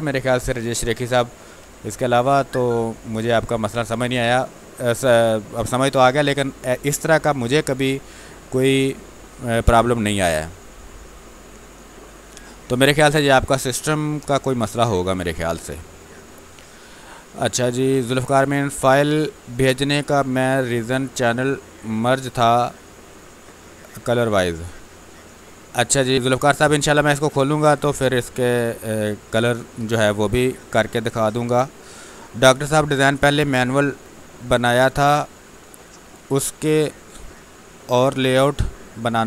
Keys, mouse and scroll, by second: 1.6 space.